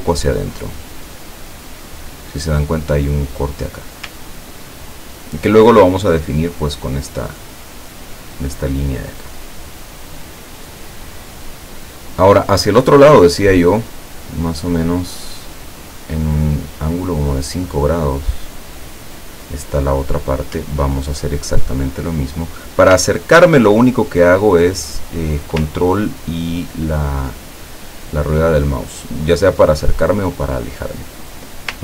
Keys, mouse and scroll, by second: 4.6-5.2 ctrl+scroll down 2, 17.9 click, 20.8-21.5 ctrl+scroll up 2, 23.3-23.9 ctrl+scroll down 2, 24.5 ctrl+scroll down 2, 25.9 ctrl+scroll up 2, 26.4-27.5 ctrl+scroll down 4, 27.9-28.8 ctrl+scroll up 4, 29.4-29.9 ctrl+scroll down 2, 29.9 ctrl+scroll down 1, 30.2 ctrl+scroll up 2.